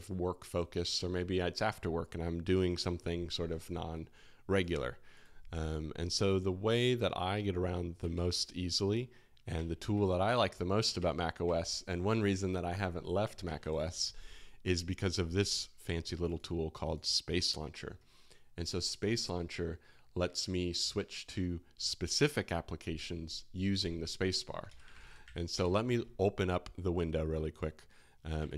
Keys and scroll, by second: 8.1 alt+2, 13.6 shift+super+], 24.6 super+space, 24.6-25.7 typing, 28.3 alt+f.